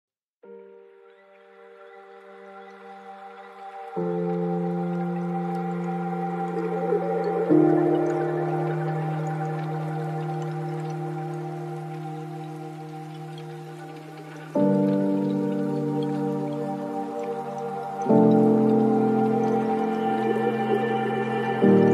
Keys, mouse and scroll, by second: 0.7-2.7 drag, 2.7-3.9 scroll up 5, 3.9 click, 4.4 space, 10.5 space, 12.2 click, 12.7 scroll down 6, 14.8 click, 15.9 click, 17.0 click, 19.0-21.9 drag.